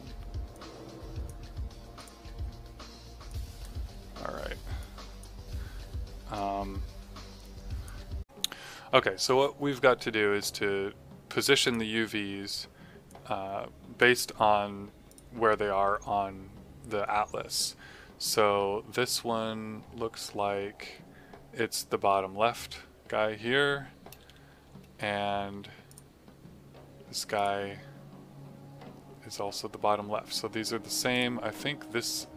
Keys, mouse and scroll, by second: 4.7 click, 11.6 click, 25.4 q, 25.8 click, 31.1 click.